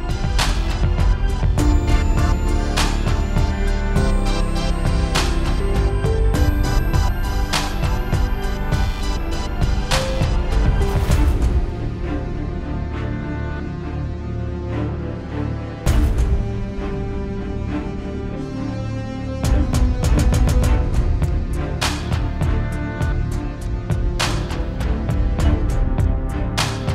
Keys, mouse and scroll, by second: 4.9 ctrl+space, 5.0 scroll down 6, 5.1-5.7 scroll up 7, 5.4 click, 5.7 KP_Decimal, 6.0 click, 6.7 click, 7.2 x, 7.7 click, 7.9 click, 9.0 click, 9.2 scroll down 4, 9.3 middle click, 9.4-9.8 scroll up 5, 9.6 KP_Decimal, 9.8 middle click, 10.2 s, 10.7-11.3 scroll down 13, 10.9 middle click, 11.0 shift+middle click, 11.2 middle click, 11.6 click, 12.0 middle click, 12.0 shift+middle click, 12.1 scroll up 4, 12.3 scroll down 1, 12.4 shift+middle click, 12.6 click, 13.2 middle click, 13.4 shift+middle click, 13.6 click, 13.9 s, 14.7 scroll down 4, 14.7 x, 14.8 shift+middle click, 14.9 scroll up 4, 14.9 middle click, 15.1 click, 15.3 s, 16.8 click, 19.3 ctrl+space, 19.5 scroll down 6, 19.5 middle click, 19.6 scroll up 5, 19.7 shift+middle click, 19.8-20.5 scroll down 3, 19.9 middle click, 20.4 scroll up 3, 20.5 middle click, 20.7 middle click, 21.2 click, 23.4 scroll down 6, 23.5 scroll up 5, 23.7 scroll down 1, 23.8 n, 24.5 click, 24.6 click, 24.8 click, 25.1 click, 25.3 scroll down 2, 25.5 shift+middle click, 25.6 scroll up 4, 25.7 middle click, 26.0 shift+middle click, 26.1 middle click, 26.3 click, 26.5-26.9 scroll down 4, 26.8 n.